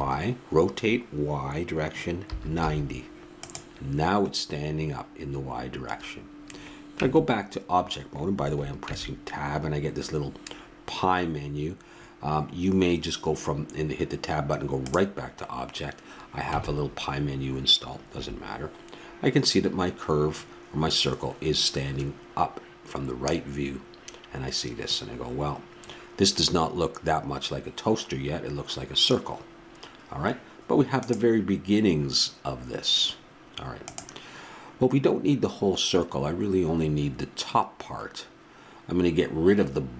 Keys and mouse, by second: 7.0 Tab, 8.9 Tab, 16.5 Tab, 28.7 middle click, 29.5-31.1 drag.